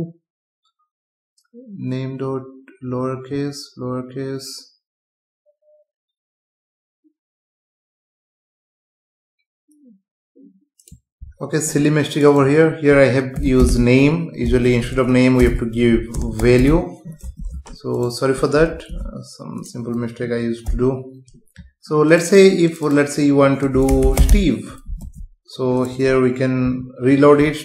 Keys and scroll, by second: 14.7 BackSpace, 17.4 ctrl+s, 18.9 ctrl+s, 20.7 F5, 25.0 ctrl+s, 26.6 F5.